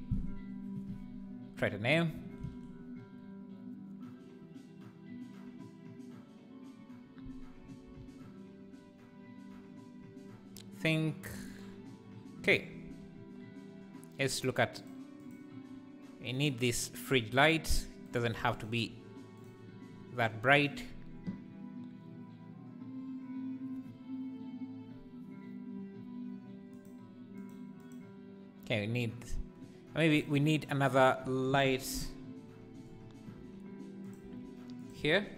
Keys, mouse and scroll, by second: 14.2 click, 14.9 click, 15.2 click, 16.5 click, 19.4 click, 26.8 click, 27.4 click, 27.8 click, 32.2 click, 33.4 r, 34.2 g.